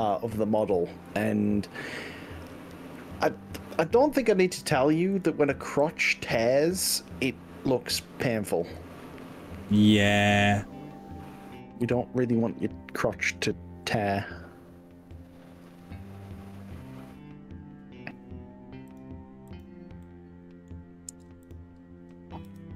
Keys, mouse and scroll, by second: 0.7 g, 1.1 z, 3.1 click, 5.3 click, 5.7 g, 7.1-8.1 scroll up 7, 8.7-9.3 scroll up 3, 9.5 scroll down 2, 10.9-11.5 scroll up 2, 13.5-13.9 scroll up 2, 13.9 scroll down 2, 14.7-15.5 scroll down 3, 17.1 scroll up 1, 18.9 click, 19.5 click, 20.0 middle click, 21.5 click, 22.5 g.